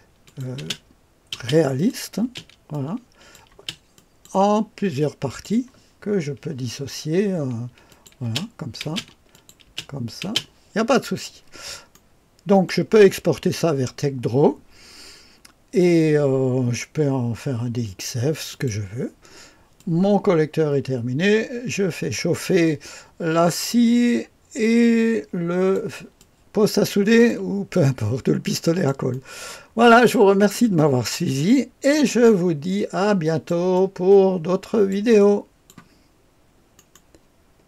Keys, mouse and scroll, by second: 0.6 space, 1.3 space, 1.7 click, 2.2 space, 2.7-6.6 drag, 3.5 space, 6.6-7.4 scroll down 5, 7.9-11.0 drag, 11.0-11.9 scroll down 1, 11.9-15.1 drag, 18.5 click, 19.7-25.7 drag, 26.1-27.3 drag, 27.7-28.9 drag, 29.8 click, 30.7-32.0 drag, 32.2-33.5 drag, 33.7-34.9 drag, 35.2 click.